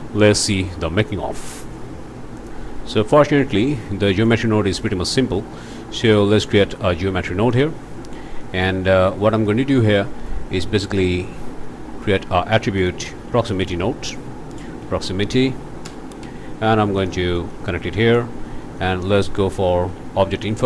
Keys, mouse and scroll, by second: 2.4 click, 3.4 click, 4.2 click, 5.1 click, 5.6 alt+a, 6.1 alt+click, 7.5 click, 8.0 scroll up 1, 8.5 click, 10.3 click, 11.7 click, 12.8 shift+click, 13.1 shift+a, 13.5 shift+click, 14.8 p, 15.0 r, 15.0 o, 15.8 Return, 17.0 click, 17.3 click, 17.9 click, 18.6 click, 19.0 click, 19.7 shift+a.